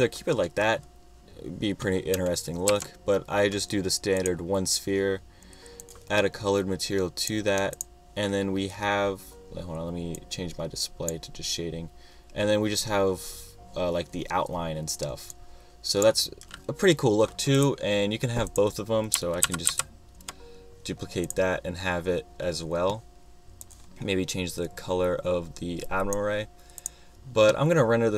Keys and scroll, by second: 2.7 |, 19.5 super+c, 19.7 super+v.